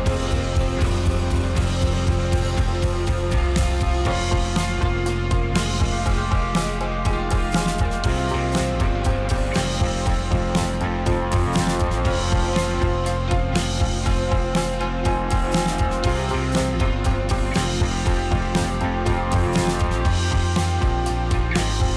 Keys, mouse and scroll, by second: 0.2 g, 1.5 g, 2.8 click, 3.0-4.4 middle drag, 4.4 click, 4.7-5.9 middle drag, 6.2 g, 7.8 g, 10.4 click, 10.5-12.6 middle drag, 12.6 click, 14.3 d, 14.5 x, 15.8 s, 16.7 click, 17.3 click, 18.5 s, 20.0 click, 20.7 s, 21.9 click.